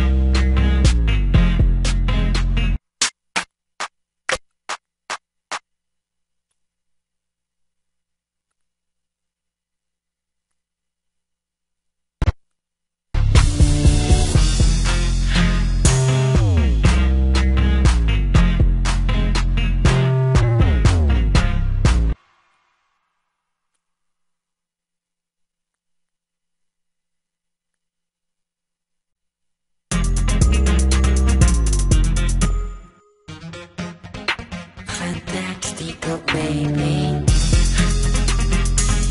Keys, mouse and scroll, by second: 11.1 ctrl+l.